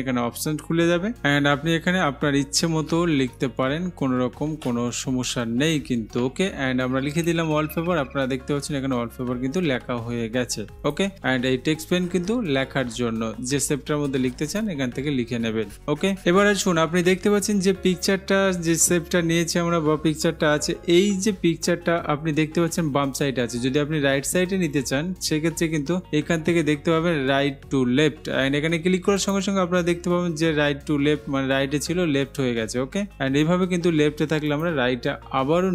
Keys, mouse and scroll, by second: 3.0 typing, 4.5-5.4 typing, 7.4-8.4 drag, 11.1 click, 14.7-15.7 drag, 29.4-30.4 drag, 34.8 click.